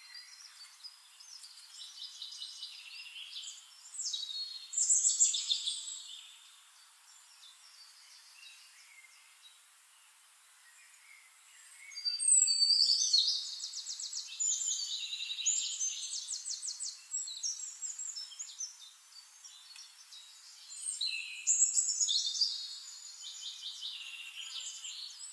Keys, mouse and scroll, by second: 0.4 click, 1.2 click, 2.8-3.6 drag, 4.6 ctrl+d, 7.4 click, 9.7 ctrl+g, 11.0-13.0 ctrl+drag, 14.3 click, 16.3 click, 17.0-18.4 drag, 19.1 click, 20.4 click, 23.1 click.